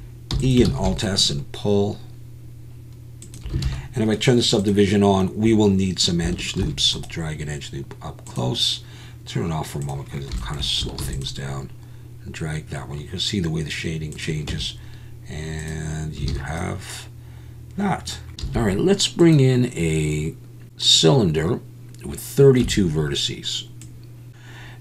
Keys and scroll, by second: 0.3 e, 0.7 alt+s, 3.6 alt+a, 6.6 ctrl+r, 11.0 ctrl+r, 14.5 Tab, 16.3 alt+a, 22.6 Tab.